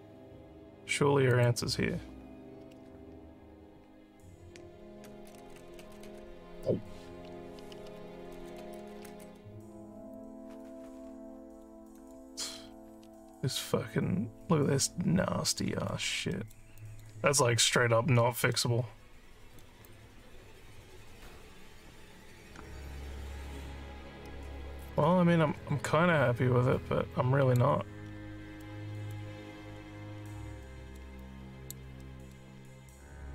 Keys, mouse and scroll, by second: 1.2 click, 5.9 click, 10.1 alt+click, 10.8 scroll down 2, 11.3 alt+middle click, 11.9 alt+click, 12.6-13.1 alt+scroll up 5, 15.8 alt+middle click, 16.3 alt+middle click, 16.7 alt+click, 18.5-19.6 alt+middle drag, 19.8-27.5 alt+drag, 28.6 alt+middle click, 29.5 alt+scroll down 1, 30.6 alt+middle click, 31.2 alt+click, 32.0 alt+middle click.